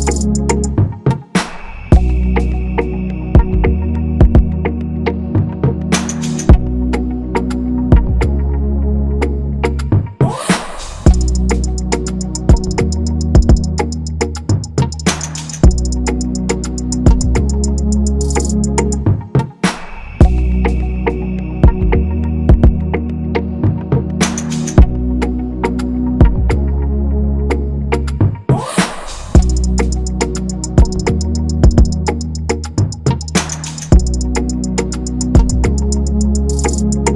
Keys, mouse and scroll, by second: 0.8 typing, 1.0 scroll down 1, 1.2-1.7 scroll, 1.7-2.4 scroll down 1, 2.4-2.9 scroll up 1, 3.0-3.9 scroll, 3.9 ctrl+=, 4.0 ctrl+=, 4.3-5.4 typing, 7.2 BackSpace, 9.6-10.5 scroll down 1, 10.5 scroll, 20.7-22.3 scroll up 1, 26.1 scroll down 1, 26.3-27.1 scroll, 28.6 scroll, 29.4 ctrl+z, 29.6 ctrl+z, 29.8 ctrl+z, 30.2 ctrl+z, 30.5 ctrl+z, 31.1 ctrl+z, 31.5 ctrl+z, 32.3 scroll, 32.6-32.9 scroll down 1, 32.9-33.6 scroll, 33.6-34.1 scroll, 34.1-34.4 scroll down 1, 34.4-36.1 scroll, 37.1 ctrl+-.